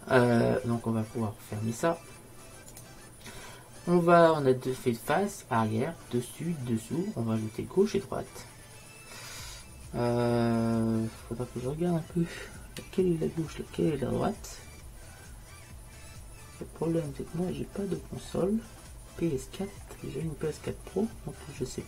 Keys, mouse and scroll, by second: 2.8-4.7 drag, 13.3-15.6 middle drag, 17.6 middle click, 19.9-21.8 middle drag.